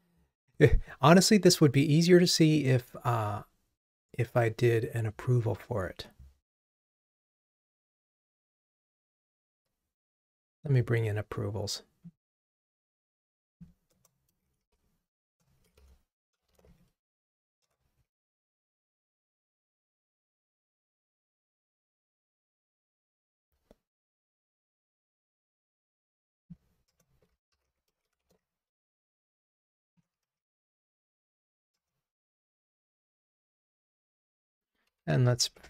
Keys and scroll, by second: 15.5 Return, 31.9 Return.